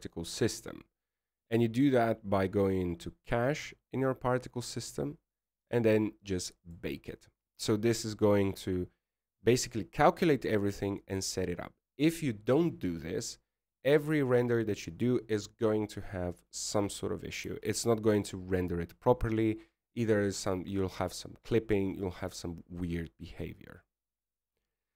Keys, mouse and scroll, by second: 0.6-1.2 scroll down 5, 1.2-2.6 scroll down 5, 2.6-3.0 scroll down 2, 4.7-5.5 scroll up 4, 5.5-6.4 scroll up 1, 6.4 click, 6.4-7.0 scroll up 4, 7.0-8.7 scroll down 1, 8.7 click, 8.7-15.4 scroll down 1, 19.8 alt+a, 23.6 scroll down 3, 24.4-24.9 scroll up 1.